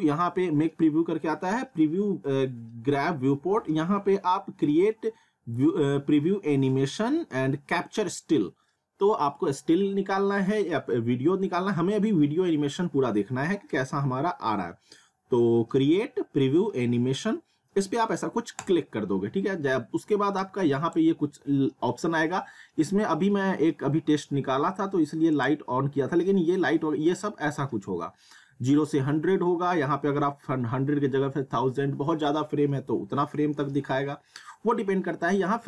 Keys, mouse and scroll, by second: 18.6 click, 25.3 click.